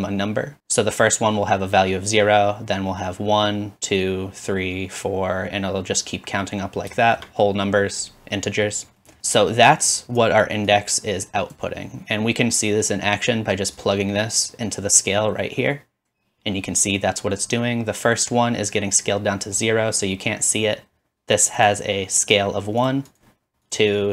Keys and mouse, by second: 0.9-19.0 drag, 21.6-23.2 drag, 23.8-24.1 drag.